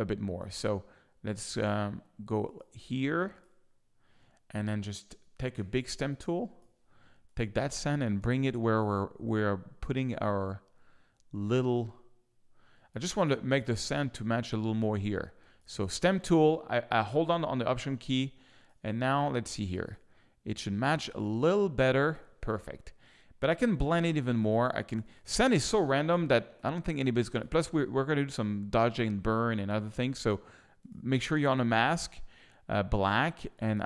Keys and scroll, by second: 5.5 s, 6.0 ctrl+alt+s, 13.0 space, 14.9 space, 18.0 alt+space, 21.2 space, 23.7 z, 26.1 s.